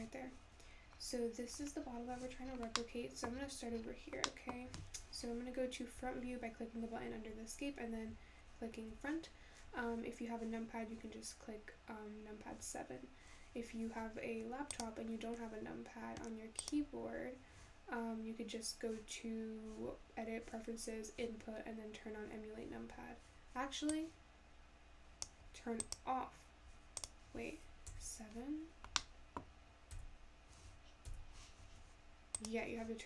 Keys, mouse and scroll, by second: 1.2-1.7 scroll down 10, 1.7 scroll up 3, 2.5 scroll up 3, 2.8-3.4 middle drag, 3.4-9.0 scroll down 6, 9.0 `.